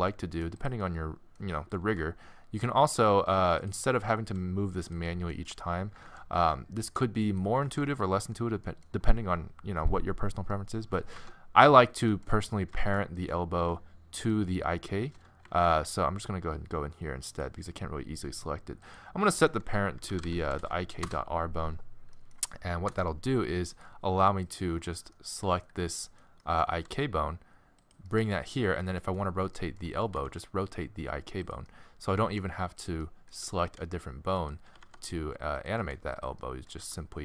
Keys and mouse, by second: 0.2 g, 1.8 g, 4.2 g, 6.1 alt+g, 7.7 alt+g, 11.2 Tab, 11.9-14.1 middle drag, 14.3 middle click, 14.7 middle click, 15.5 ctrl+z, 17.3-22.1 drag, 22.1-24.1 middle drag, 22.9 Tab, 24.1-25.1 drag, 25.1 middle click, 26.7 g, 30.3 r, 32.3 g, 33.7 r, 34.7 r, 35.8 r, 36.8 g.